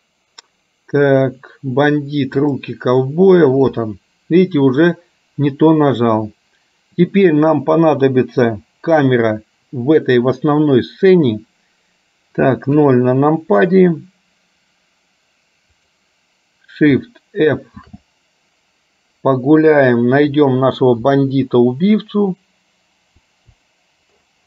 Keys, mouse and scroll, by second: 0.0-4.9 drag, 9.0 click, 12.9 KP_0, 15.8 click, 17.9 shift+f.